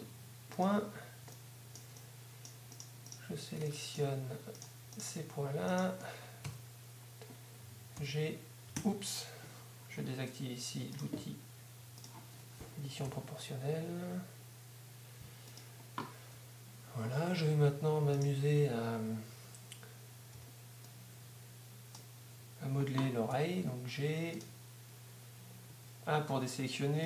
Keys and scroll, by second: 8.0 g, 8.7 g, 13.1 g, 14.7 g, 26.7 a.